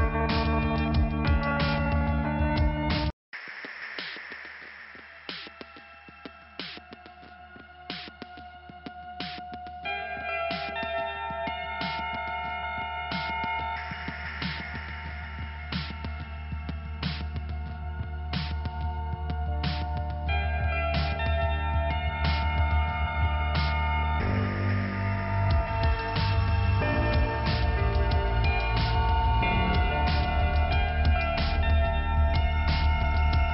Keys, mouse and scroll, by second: 0.2 click, 5.4 click, 5.5 click, 6.7 click, 7.4 click, 11.0 click, 12.5 middle click, 15.1 click, 19.4 click, 20.7 click, 21.6 scroll down 1, 22.2 middle click, 23.9 click, 25.4 scroll up 1, 26.5 middle click, 28.2 click, 29.9 click, 31.4 click, 31.7 click, 31.9 double click, 32.5 double click.